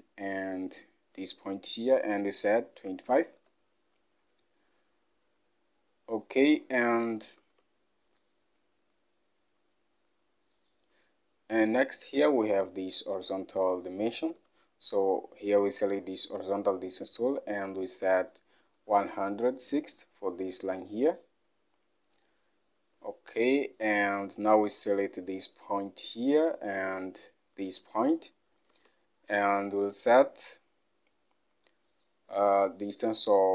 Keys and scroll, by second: 2.8 typing, 3.4 Return, 7.5 alt+Tab, 14.4 alt+Tab, 18.9-19.3 typing, 19.8 Return, 28.8 alt+Tab.